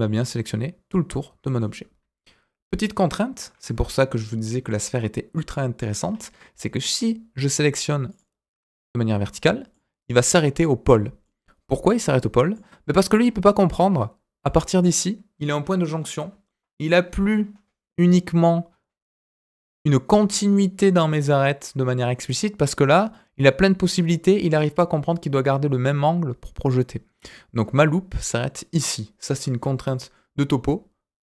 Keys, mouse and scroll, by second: 3.7 KP_1, 6.1 scroll up 1, 8.0 alt+click, 9.4 scroll down 2, 9.7 middle click, 11.2 middle click, 12.5 middle click, 13.1-13.5 scroll up 2, 13.5 middle click, 13.8-16.9 scroll up 2, 27.1-29.7 scroll down 2, 30.1-31.3 middle drag.